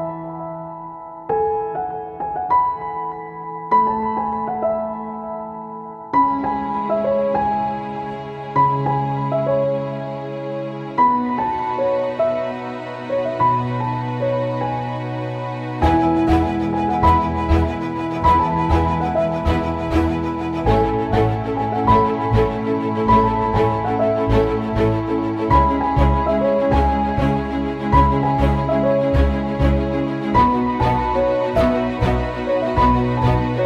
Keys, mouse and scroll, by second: 1.5-16.8 drag, 17.7 ctrl+c, 18.0 ctrl+v, 18.5-21.4 drag, 21.4 ctrl+z, 24.0 click, 24.4 ctrl+c, 24.8 ctrl+v, 25.3-28.4 drag, 29.2 ctrl+c, 29.6 ctrl+v, 30.0-33.6 drag.